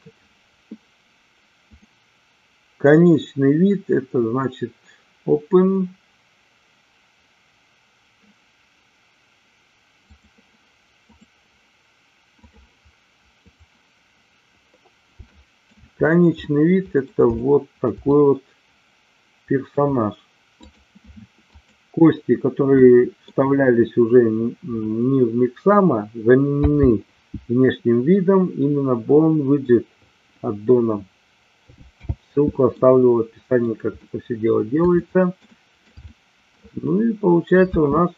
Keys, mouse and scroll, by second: 1.8-11.4 drag, 15.3 shift+middle click, 16.4 middle click, 17.3 shift+middle click, 18.0-19.6 middle drag, 20.5 click, 21.5 click, 22.8 middle click, 26.5 n, 31.9 n, 32.7 middle click, 34.0 middle click, 34.9 shift+middle click, 35.4 shift+middle click, 36.0 middle click, 37.8 space.